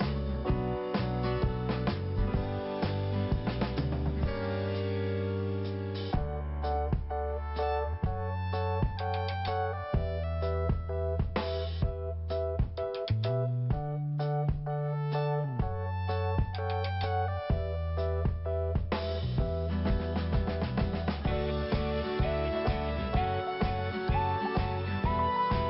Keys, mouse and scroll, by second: 0.6 click, 0.7 click, 1.8 click, 1.9 click, 2.9 click, 3.8 click, 6.3 click, 6.8 click, 9.0 click, 9.1 click, 9.5 click, 11.8 click, 11.9 click, 12.2 click, 14.4 click, 14.8 click, 15.8 scroll down 1, 18.3 click, 22.2-22.5 scroll up 1, 24.2 click, 24.3 click, 25.1 click, 25.6 click.